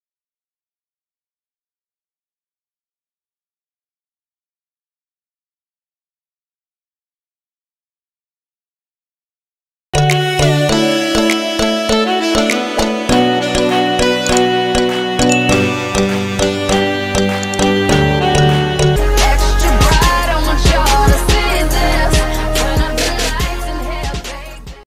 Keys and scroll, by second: 7.0 alt+space, 8.2 alt+space, 8.9 alt+space.